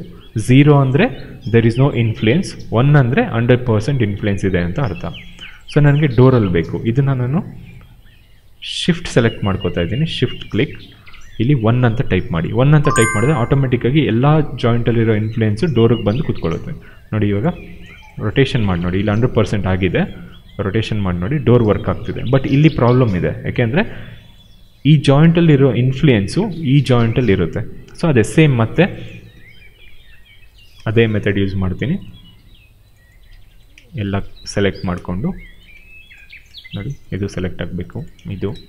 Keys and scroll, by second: 11.9 1, 12.1 Return, 18.1 w, 19.9 e, 23.4 ctrl+z, 29.2 q.